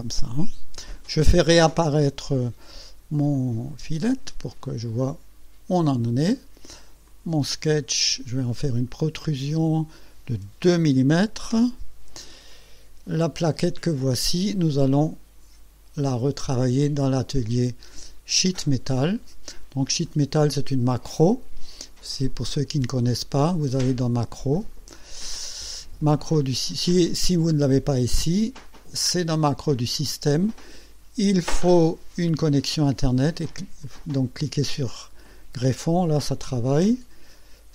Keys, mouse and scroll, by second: 3.4 click, 3.7 space, 4.6-6.2 drag, 7.1 click, 8.6 click, 10.6 KP_2, 11.6 Return, 12.6 click, 16.4 click, 18.6 click, 19.6 scroll up 1, 20.1-20.7 right drag, 22.6 click, 24.5 click, 29.4 click, 33.9 click.